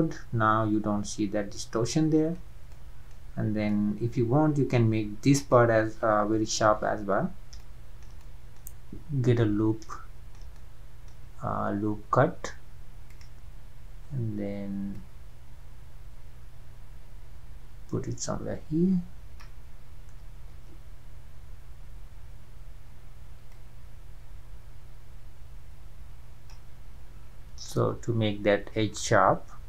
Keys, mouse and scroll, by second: 3.3-3.7 scroll up 2, 3.7-5.4 middle drag, 5.4 click, 6.7 Tab, 7.6-9.4 shift+middle drag, 9.4 scroll up 2, 10.0-10.5 shift+middle drag, 10.5 scroll up 1, 10.6-13.1 middle drag, 13.1-18.8 drag, 20.9 ctrl+z, 24.0-26.6 drag, 27.2-27.6 scroll up 2, 27.7-29.6 middle drag.